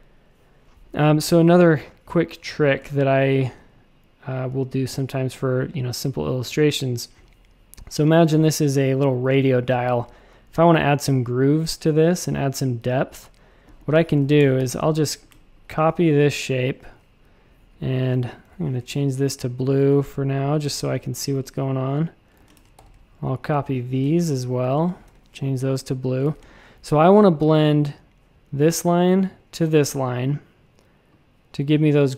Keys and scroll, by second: 1.0 space, 1.5 space, 1.5 space, 14.4 shift+super+a, 14.6 super+f, 17.5 x, 18.4 i, 19.8 shift+super+a, 20.6 a, 22.3 super+c, 22.5 shift+super+a, 22.7 super+f, 25.0 i, 26.2 shift+super+a, 26.4 space.